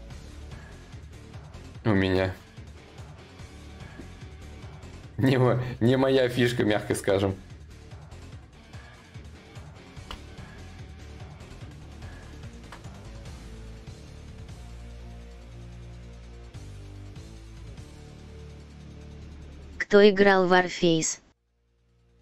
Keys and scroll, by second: 9.7 ctrl+z, 12.0 ctrl+z, 17.9 ctrl+z.